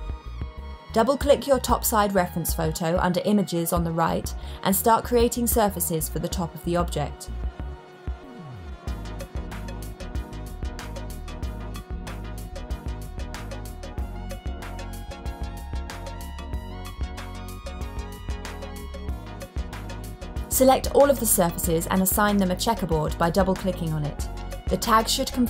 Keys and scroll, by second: 0.4-1.1 typing, 6.2 Return, 6.3 typing, 6.6 Return, 7.4 super+d, 11.5 Return, 11.6 Tab, 11.8 BackSpace, 11.9 l, 12.1 Return, 12.4 super+d, 15.4 Return, 15.7 Tab, 15.7 BackSpace, 15.9 r, 16.0 Return.